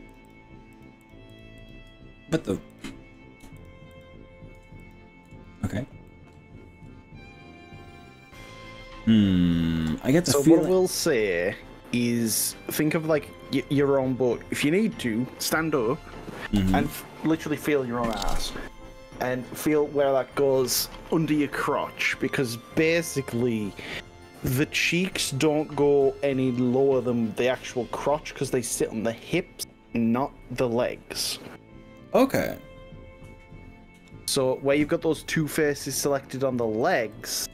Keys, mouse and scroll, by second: 0.8 ctrl+click, 1.6 ctrl+click, 2.2-2.6 scroll up 2, 2.8 click, 3.0-3.4 scroll down 2, 3.6 ctrl+click, 4.8 ctrl+shift+click, 6.1-10.0 middle drag, 11.0 shift+click, 11.6-16.2 middle drag, 36.8 shift+click, 37.2 shift+click.